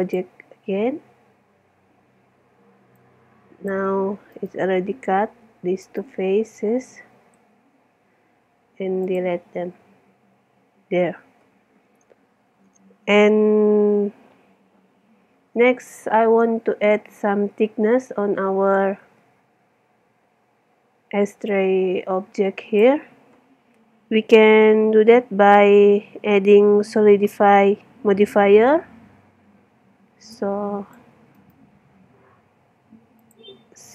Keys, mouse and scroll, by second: 0.0-1.8 drag, 3.0 click, 4.3 middle click, 4.9-7.4 right drag, 7.4 x, 9.9-12.4 middle drag, 19.0 Tab, 20.0-21.5 middle drag, 21.5 click, 29.7-33.1 middle drag, 31.4 click, 33.2 middle click, 33.7-33.9 drag.